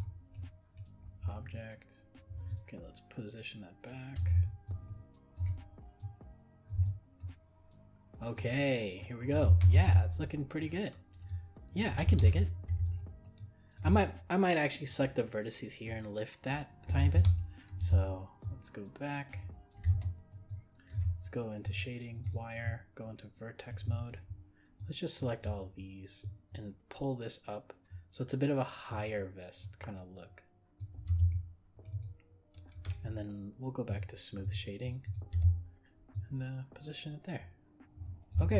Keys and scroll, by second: 12.2 ctrl+z.